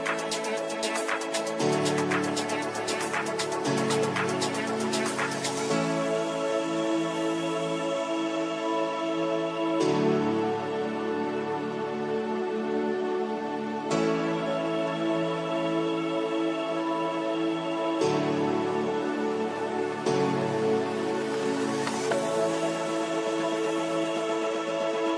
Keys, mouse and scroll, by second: 0.9-4.1 shift+drag, 4.9 click, 7.2 click, 9.0 shift+4, 10.4-20.1 drag, 20.1-22.2 right drag, 22.2-25.1 drag.